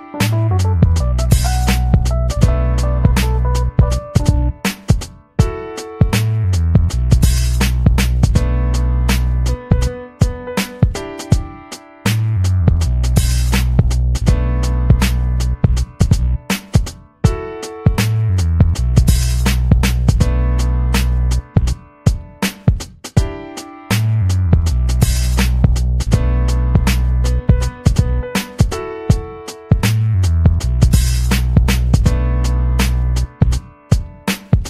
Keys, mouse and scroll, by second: 0.5-2.4 typing, 3.1 click, 3.6-5.0 drag, 5.5 click, 6.3 click, 7.1 click, 9.3 click, 10.0 click, 10.7 click, 11.1 click, 12.2-13.3 drag, 13.7 ctrl+click, 14.4 click, 14.8-17.1 ctrl+drag, 17.3 ctrl+scroll up 2, 17.6 ctrl+middle click, 18.3 click, 19.5 click, 20.2 click, 21.3 click, 22.4 click, 23.3 ctrl+scroll down 2, 23.6 click, 24.0 middle click, 24.3 middle click, 24.5 ctrl+scroll down 2, 24.9 middle click, 25.5 ctrl+scroll down 2, 26.7 middle click, 28.2 click, 28.8 ctrl+c, 29.4 click, 32.3 ctrl+scroll up 2, 32.9 ctrl+scroll up 2, 34.5 click.